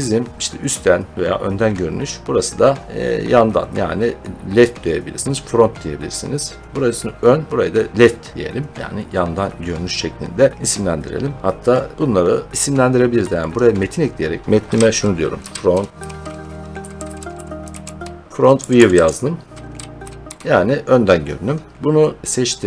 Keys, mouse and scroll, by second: 2.2 scroll up 9, 8.7 middle click, 9.1 scroll up 4, 9.2 middle click, 10.7-11.6 scroll down 3, 11.6 middle click, 11.9-12.3 scroll, 13.4 click, 13.9-14.2 scroll up 3, 14.4 click, 15.4-20.7 typing, 22.2 click.